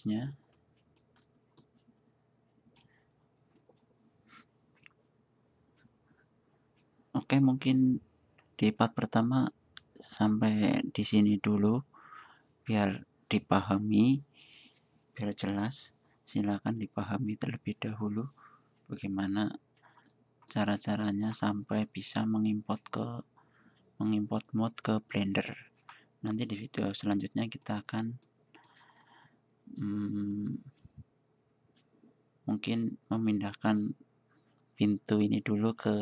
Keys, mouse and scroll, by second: 0.6 middle drag, 27.4 middle drag, 27.6 middle drag, 27.9-28.4 middle drag, 28.5 middle click, 28.5-29.2 middle drag, 29.9 middle click.